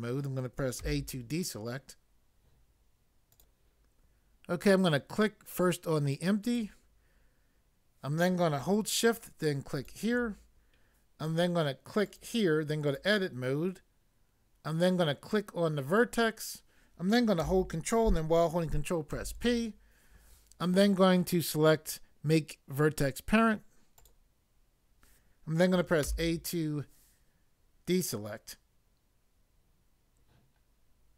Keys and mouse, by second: 0.8 a, 3.3 click, 6.4 click, 9.8 shift+click, 12.0 click, 12.8 click, 15.9 click, 19.1 ctrl+p, 24.0 click, 26.0 a.